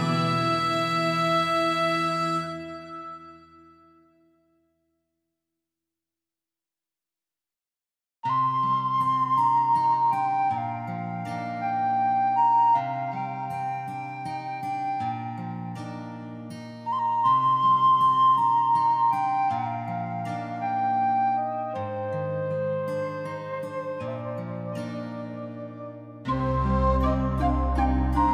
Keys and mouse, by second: 0.1 click, 0.5 g, 1.3 click, 1.8 click, 1.9 shift+middle click, 2.4 click, 2.6 click, 2.8 g, 3.5 right click, 4.0 g, 4.1 g, 4.5 click, 4.7 middle click, 5.0 alt+middle click, 5.1 alt+middle click, 5.4 shift+middle click, 5.9 click, 6.2 shift+middle click, 6.5 click, 7.6 click, 7.8 click, 8.1 alt+z, 8.3 g, 8.8 shift+click, 9.3 g, 10.7 click, 11.6 g, 12.1 right click, 12.5 g, 13.0 click, 13.3 click, 13.4 g, 14.5 click, 14.8 Tab, 15.0 alt+z, 15.1 middle click, 15.6 alt+middle click, 16.1 shift+middle click, 16.4 middle click, 16.6 alt+middle click, 16.8 shift+middle click, 17.2 shift+middle click, 17.4 click, 17.8 ctrl+s, 18.0 shift+middle click, 18.8 middle click, 19.0 click, 19.1 middle click, 19.3 alt+middle click, 19.5 alt+middle click, 19.7 shift+middle click, 19.9 Tab, 20.1 shift+click, 20.3 alt+z, 20.6 click, 20.9 g, 21.1 right click, 21.3 g, 21.9 right click, 22.3 click, 22.5 g, 23.2 click, 23.7 Tab, 24.0 alt+z, 24.1 middle click, 25.1 middle click, 25.6 middle click, 26.0 middle click, 26.2 Tab, 26.3 shift+middle click, 26.6-27.9 middle drag, 28.2 middle click.